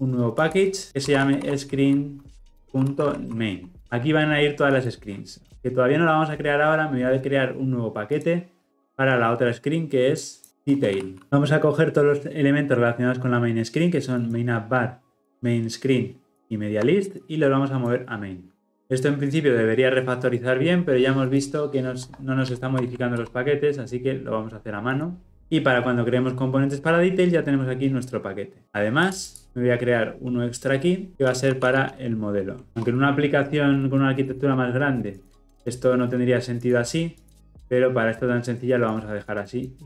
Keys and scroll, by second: 22.8 alt+Return.